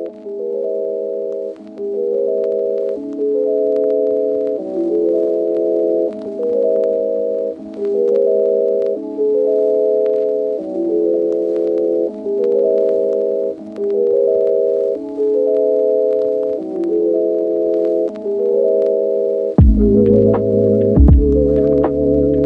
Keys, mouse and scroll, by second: 0.1 click, 0.9 Tab, 2.9 shift+middle click, 4.5 click, 4.7 Tab, 5.9-6.2 ctrl+r, 6.8-8.2 typing, 8.7 click, 9.0 ctrl+r, 9.7 click, 10.4 g, 10.5 g, 13.8 shift+middle click, 14.3 shift+a, 16.9-20.8 typing, 21.7 click.